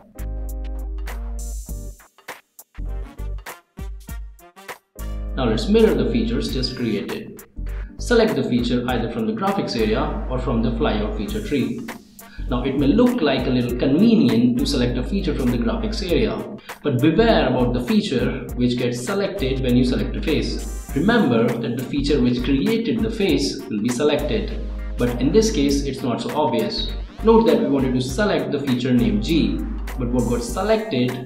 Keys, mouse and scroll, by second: 1.9 click, 2.5 click, 2.9 scroll down 1, 3.0 middle click, 4.4 ctrl+s, 4.8 click, 10.5 click, 12.9 click, 15.8 click, 17.3 click, 20.6 click, 22.8-29.1 middle drag, 29.1-31.2 middle drag.